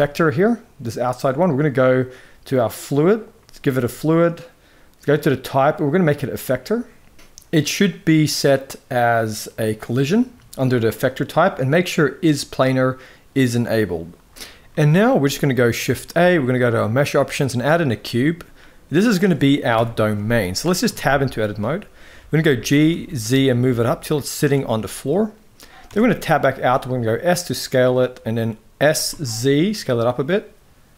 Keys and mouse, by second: 2.9 click, 5.0-6.0 drag, 8.9-10.0 drag, 13.9 click, 14.4 middle click, 15.0 middle click, 15.6 shift+a, 19.5 KP_1, 20.1 shift+middle click, 20.6 Tab, 20.9 z, 22.1 g, 24.5 middle click, 25.6 Tab, 25.9 middle click, 26.3 s, 28.6 s.